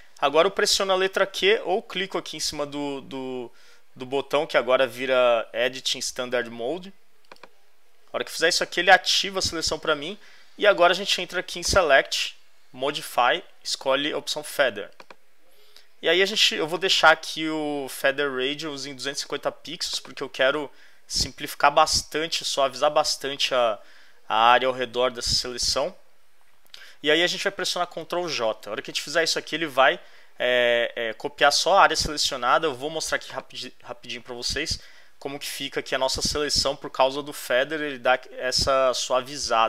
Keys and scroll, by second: 28.6 super+j.